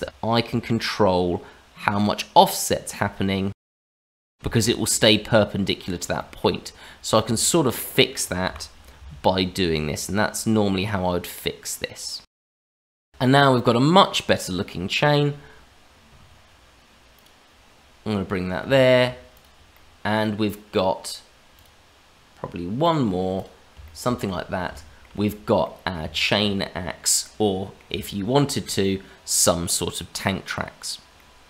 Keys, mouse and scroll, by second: 0.0 shift+middle click, 0.0 g, 4.7 shift+middle click, 5.6-6.1 scroll up 2, 6.2 shift+middle click, 7.0 scroll down 1, 7.4 shift+middle click, 8.4 g, 12.7 shift+middle click, 13.2 middle click, 17.1 click, 17.6-18.6 scroll down 2, 18.6 Tab, 19.3 click, 19.7 middle click, 20.6-21.5 scroll up 2, 21.5 click, 22.8 click, 23.3 click, 23.8 shift+middle click, 24.1 middle click, 24.7 shift+middle click, 25.6 middle click, 26.1 shift+middle click, 27.2 middle click, 28.0 shift+middle click, 31.1 middle click.